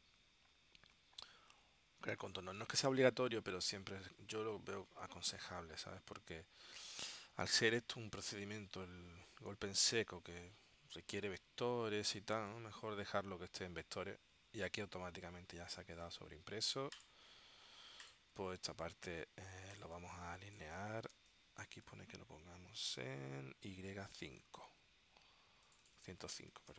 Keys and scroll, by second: 20.1 space, 21.2 space, 26.4-26.7 typing.